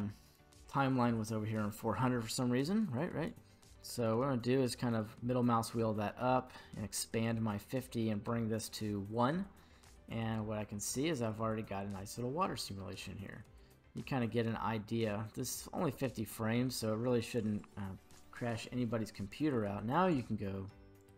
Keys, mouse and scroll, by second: 0.3-3.3 drag, 3.6-4.7 scroll up 6, 4.7-5.7 middle drag, 6.1 middle click, 6.3-7.0 scroll up 3, 7.0 middle click, 8.6 click, 10.1-17.4 drag.